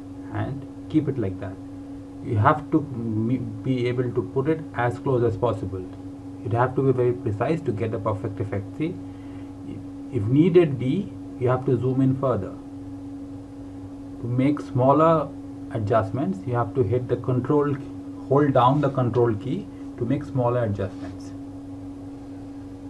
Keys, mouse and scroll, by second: 1.6 scroll down 1, 7.0 click, 10.8 click, 14.0 scroll up 1, 16.6 ctrl+scroll down 1, 17.6 ctrl+scroll down 1, 22.4 alt+Num_Lock, 22.7-22.8 scroll down 2.